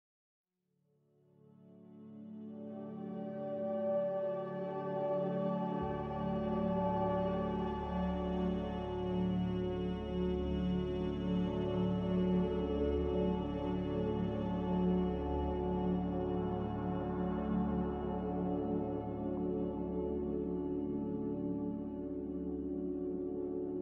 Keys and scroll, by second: 12.2 ctrl+g, 17.2 x, 17.9 z.